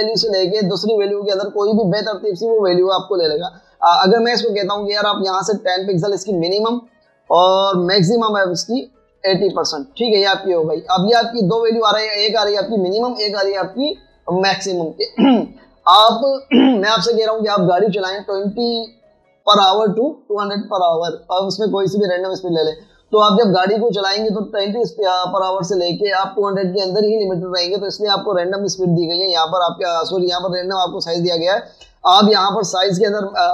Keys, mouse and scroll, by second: 7.1-8.0 typing, 9.2 double click, 10.3-12.1 typing.